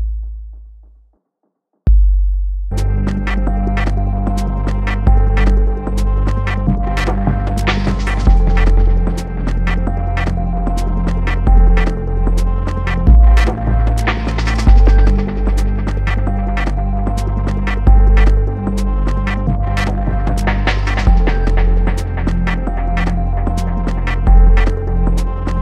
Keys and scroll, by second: 12.8 BackSpace.